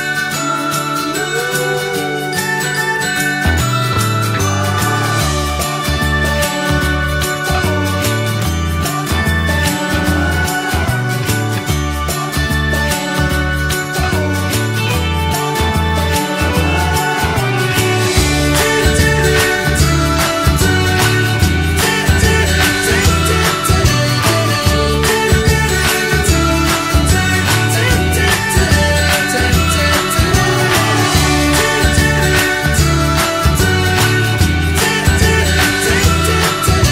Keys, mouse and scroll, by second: 0.3 middle click, 0.5-0.9 scroll up 1, 0.9 shift+a, 5.4 middle click, 5.8 click, 6.5-7.9 drag, 8.6 click, 9.4 middle click, 9.9 click, 11.7 middle click, 12.0 scroll down 1, 12.4 click, 13.0 scroll up 3, 13.1-14.9 middle drag, 14.9-16.4 drag, 18.1 click, 18.9 click, 22.7 click, 23.0 scroll down 1, 23.2 middle click, 23.5 scroll up 1, 23.8-25.1 shift+middle drag, 25.1 click, 31.7 click, 32.6-33.6 drag.